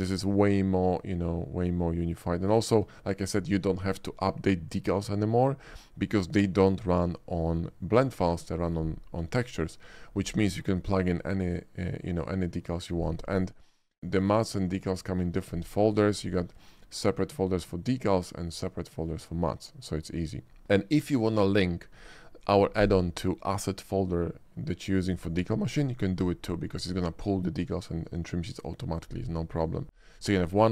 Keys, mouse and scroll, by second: 0.6-2.2 shift+middle drag, 2.5 shift+middle click, 3.0 shift+middle click, 14.3 click, 16.7 click.